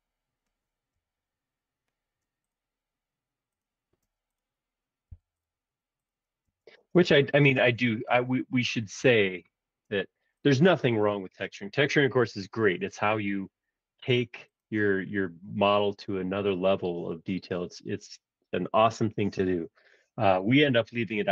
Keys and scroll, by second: 1.1 Tab, 4.0 space, 5.1 m, 6.4 space, 9.0 b.